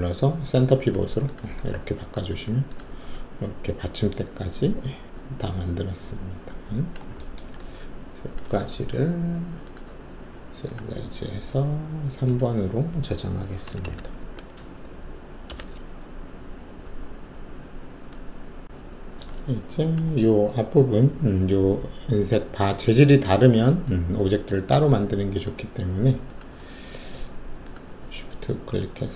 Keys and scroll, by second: 13.8-14.2 typing, 15.5 Return.